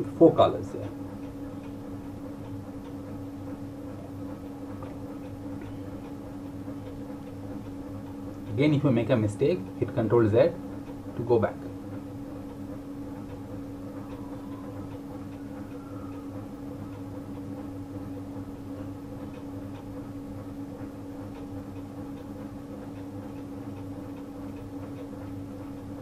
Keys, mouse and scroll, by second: 5.1 click, 8.5 ctrl+Num_Lock, 8.8 ctrl+z, 10.8 click, 18.1 click, 20.6 click, 23.2 click.